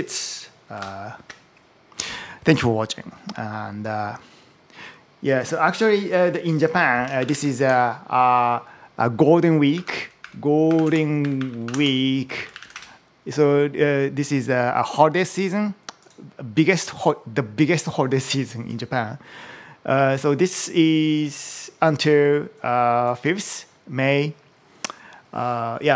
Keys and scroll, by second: 0.6 super+h, 7.0 ctrl+shift+super+m, 7.4 super+t, 9.5-12.9 typing.